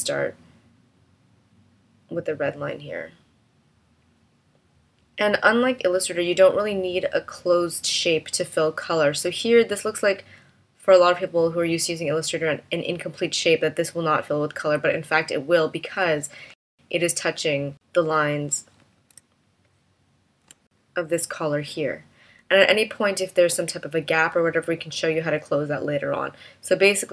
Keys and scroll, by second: 18.3 shift+v.